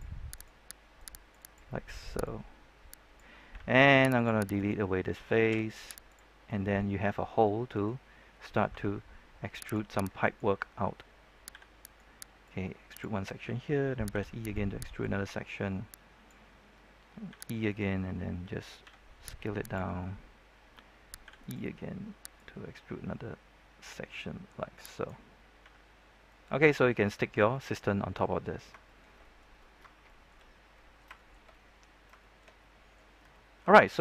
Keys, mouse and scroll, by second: 0.3 right click, 0.9 click, 4.1 ctrl+Tab, 4.1 click, 4.5 right click, 5.4 x, 6.0 click, 6.4 middle click, 7.0-7.3 scroll up 1, 7.3 middle click, 8.0 scroll down 1, 8.2 scroll up 1, 9.6 click, 10.2-11.3 alt+right drag, 11.5 e, 11.8 right click, 12.4 click, 14.1 e, 14.9-16.3 drag, 17.2 e, 17.6 right click, 18.8 s, 19.5 click, 21.2 e, 21.4 right click, 22.3-25.5 drag, 25.8 Tab, 25.8-26.2 scroll down 1, 26.2 middle click, 27.9 scroll down 1, 28.1 middle click, 28.5 scroll up 1, 28.8 shift+middle click, 30.0 shift+middle click, 30.7 middle click, 31.1 shift+middle click, 32.1 shift+middle click, 33.0-33.3 scroll up 1, 33.3 shift+middle click.